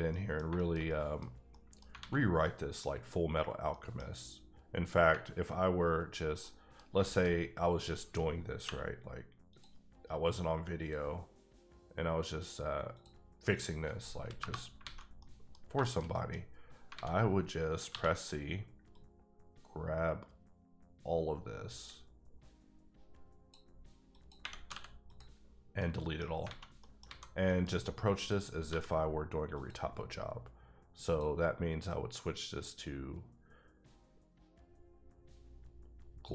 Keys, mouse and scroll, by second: 0.1 middle click, 0.8 middle click, 1.5 middle click, 2.0 alt+a, 2.3 scroll down 1, 2.4 middle click, 3.7 middle click, 5.1 alt+middle click, 6.8 scroll down 2, 7.0 shift+middle click, 8.6 k, 9.5 click, 10.8 click, 12.9 click, 13.5 click, 14.3 KP_Enter, 14.8 alt+a, 15.2 middle click, 15.7 shift+middle click, 16.4-16.8 scroll up 2, 16.9 alt+a, 17.9 c, 18.0-18.4 scroll down 1, 18.4-18.9 scroll up 4, 18.9-21.1 drag, 23.8 scroll up 3, 24.1 click, 24.4 ⊘, 24.7 x, 25.1 click, 25.8 middle click, 26.4 alt+a, 26.8 middle click, 27.0 a, 27.5 middle click, 27.7 scroll up 1, 28.2 click, 28.7 g, 29.5 click, 31.0 click.